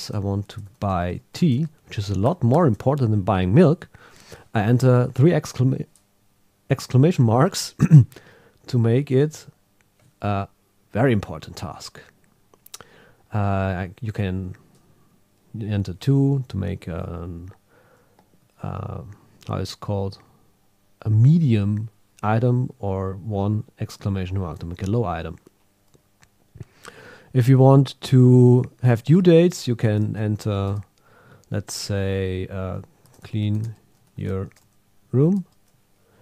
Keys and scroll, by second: 0.4 shift+b, 1.8 shift+1, 2.3 shift+1, 9.1 Return, 33.0 shift+c.